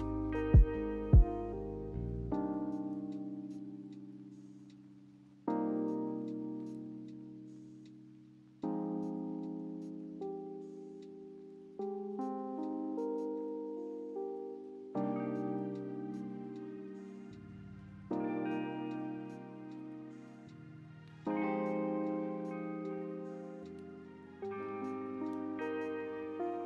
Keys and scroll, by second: 0.8-1.6 typing, 6.5 b, 10.6 a, 13.7 n, 16.9 a, 20.7 a, 26.2 a.